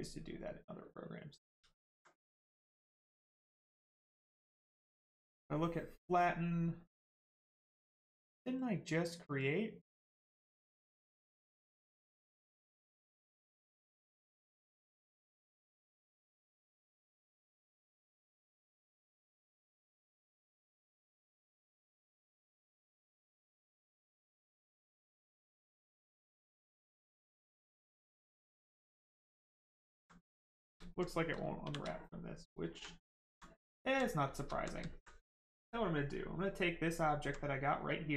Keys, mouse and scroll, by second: 0.0 click, 0.8 right click, 1.7 alt+right click, 2.3 right click, 2.4 right click, 4.8 click, 12.4 click, 13.6 right click, 21.6 click, 22.9 right click, 27.5 click, 29.1 right click, 30.0 alt+right click, 30.4 right click, 30.5 right click, 30.6 shift+right click, 30.8 alt+right click, 31.3 shift+right click, 31.6 shift+f, 32.2 right click, 32.7 alt+right click, 33.1 right click, 33.2 right click, 33.8 alt+right click, 34.1 right click, 34.3 shift+right click, 34.5 alt+right click, 35.7 right click, 35.8 right click, 37.2 alt+right click, 37.8 right click.